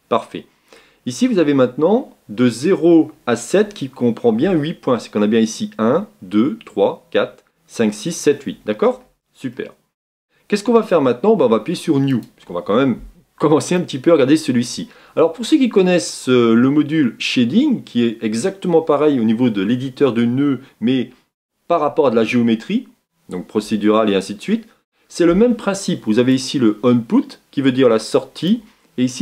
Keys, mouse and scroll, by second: 4.4 Tab, 8.9 Tab, 9.5-10.7 middle drag, 10.7-11.8 scroll down 2, 12.2-29.2 drag.